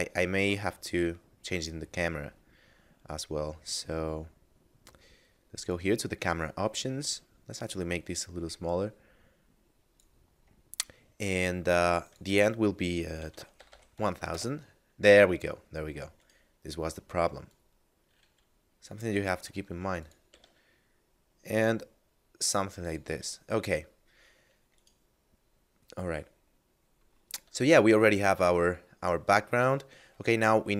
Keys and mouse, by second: 2.5 middle click, 5.6 click, 12.0 click, 13.2 1, 13.2 0, 14.3 Return, 16.2 right click, 17.5 click, 19.4 r, 20.0 click, 20.1 g, 20.3 z, 22.8 click, 23.0 a, 24.6 right click, 27.3 a, 28.0 right click, 28.4 a, 30.3 middle click.